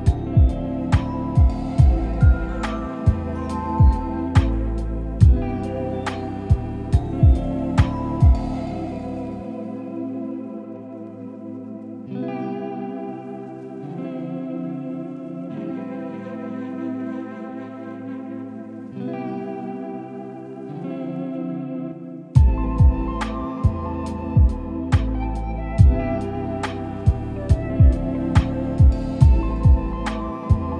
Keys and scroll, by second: 7.9 ctrl+j, 11.2 ctrl+j, 13.4 ctrl+j, 16.9 ctrl+j, 20.3 ctrl+j, 23.1 ctrl+j, 23.8 Delete, 26.7 ctrl+shift+g, 28.1 ctrl+shift+g.